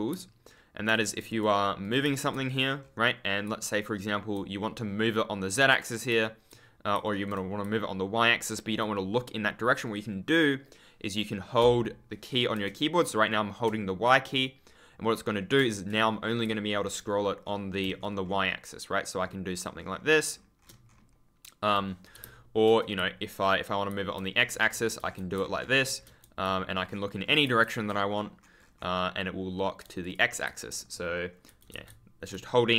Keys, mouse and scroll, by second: 0.3 super+scroll down 1, 0.8-3.4 typing, 1.2 click, 2.7 scroll down 1, 5.5 a, 6.0 ctrl+a, 6.9 ctrl+d, 7.5 d, 12.5 shift+y, 14.5 y, 15.7 shift+y, 16.4 a, 17.0-17.4 scroll up 1, 17.7 space, 18.1-19.1 scroll up 1, 19.2-19.7 scroll up 1, 19.7-20.1 scroll down 1, 20.2 scroll up 1, 20.8 scroll up 1, 22.9 x, 24.0 scroll down 1, 24.3 scroll up 1, 24.6 space, 25.0 scroll up 1, 25.5 scroll up 1, 25.8 space, 28.5 scroll down 1, 28.7-29.1 scroll up 1, 29.9 click, 30.1-31.8 typing, 30.7-31.6 scroll up 2, 32.2 shift+F10, 32.6-32.7 scroll up 1.